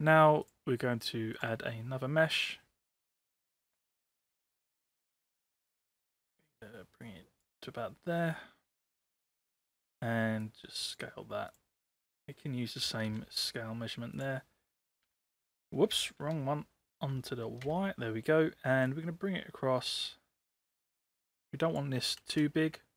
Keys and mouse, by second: 0.6-1.6 drag, 2.0 middle click, 5.2-7.4 drag, 9.3 space, 10.4 click, 11.5 click, 13.1 ctrl+c, 14.2 click, 15.1 ctrl+v, 16.3 ctrl+z, 17.7 ctrl+v, 19.0-21.8 drag, 22.3 space.